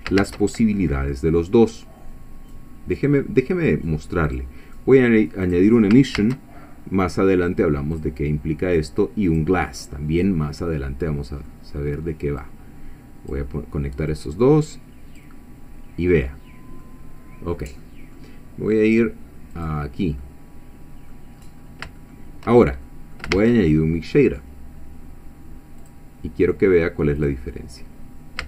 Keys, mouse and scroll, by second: 0.2 shift+a, 4.3 click, 5.4 click, 6.2 shift+a, 7.9 click, 9.2 click, 9.6-12.4 middle drag, 12.4-13.4 drag, 14.1-15.4 drag, 16.3-16.6 scroll down 2, 16.8-18.4 middle drag, 19.0 click, 19.6 click, 20.2-21.3 middle drag, 21.4-21.8 scroll up 2, 22.0 shift+middle click, 22.8 shift+middle click, 23.4 shift+a, 25.8 click, 27.2 click, 28.0 scroll down 2.